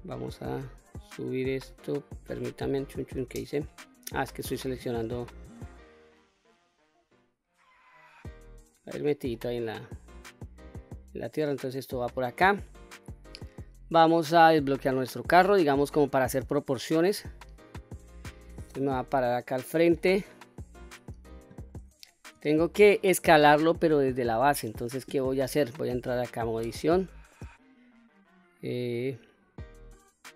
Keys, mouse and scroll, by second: 2.5 ctrl+z, 3.4 click, 4.1 click, 4.9-8.3 drag, 8.6-8.9 scroll down 2, 8.9-9.5 middle drag, 9.5-10.8 scroll down 4, 10.8-11.7 drag, 12.0-13.6 scroll down 1, 14.2 click, 15.2-16.0 middle drag, 16.2-16.9 scroll down 1, 18.7 KP_1, 19.6-20.1 scroll up 2, 20.9-21.5 shift+middle drag, 21.6-22.0 scroll up 2, 22.1-22.6 shift+middle drag, 26.2 Tab, 26.9 middle click, 28.1-28.6 scroll up 2, 28.6 scroll down 1, 28.7-29.6 scroll down 3, 29.4-30.3 middle drag.